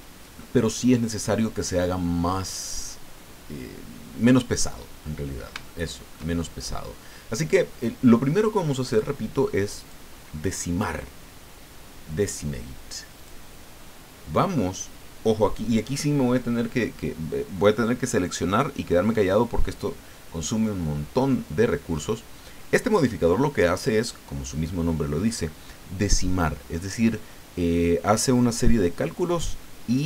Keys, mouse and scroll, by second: 2.3 scroll down 2, 2.4-5.1 middle drag, 5.2-5.5 scroll up 2, 5.6 shift+middle click, 8.8 click, 9.8 click, 13.2 click.